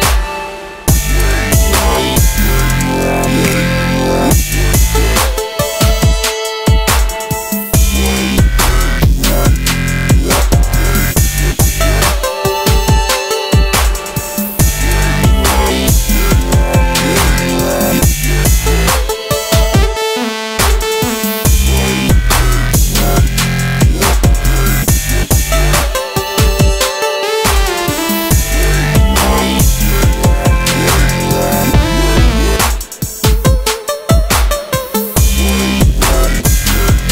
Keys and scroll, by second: 1.3 space, 1.7 space, 7.0 a, 8.4 space, 10.7 ctrl+c, 11.1 ctrl+f, 13.3 ctrl+z, 13.9 space, 20.9 space, 27.6 space.